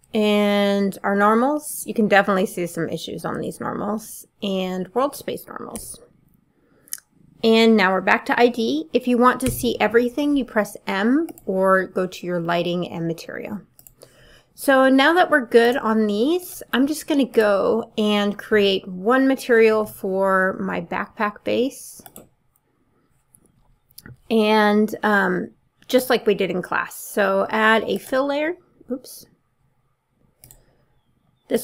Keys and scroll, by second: 3.3 b, 5.8 b, 9.5 m.